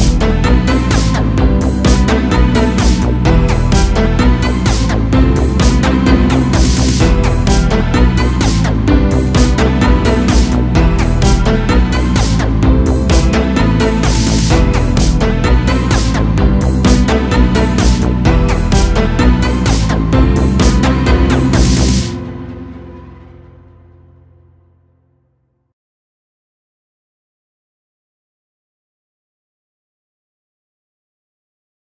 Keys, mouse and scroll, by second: 2.9 a, 3.1 a, 3.6-4.1 scroll down 1, 4.6 scroll down 1, 4.6 shift+`, 8.0 a, 8.2 a, 10.0-10.7 scroll up 4, 10.9 click, 12.3 click, 13.3 click, 14.2 click, 15.3-15.8 drag, 16.4 click, 17.5-18.1 drag, 18.7 click, 19.7 click, 20.0-20.5 scroll down 2, 20.5 a, 20.6 a, 22.2-24.5 drag, 24.5 Left, 28.6 a, 28.8 a, 31.0 click.